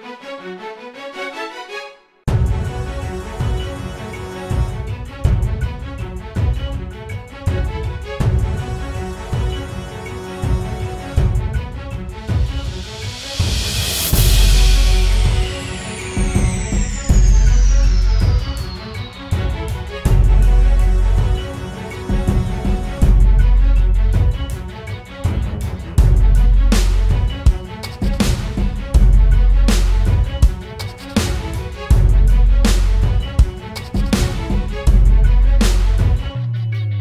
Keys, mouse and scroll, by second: 18.1-18.9 typing, 20.0 double click, 20.4-20.9 typing, 31.2 alt+click, 36.6 right click.